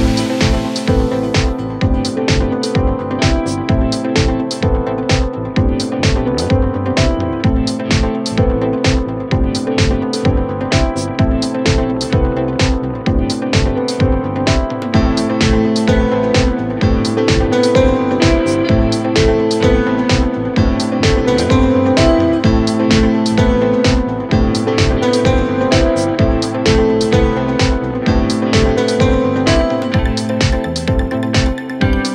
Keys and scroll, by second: 3.8 F3, 28.5 shift+Page_Up.